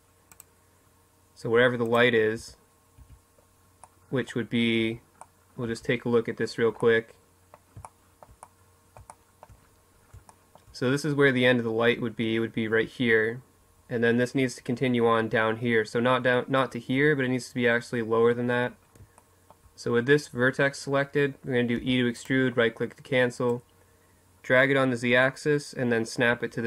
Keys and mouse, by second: 1.1 z, 1.7 z, 2.5 middle click, 3.5 z, 4.4 z, 8.7-10.9 middle drag, 17.4-19.6 middle drag, 20.5 e, 22.2-23.8 drag.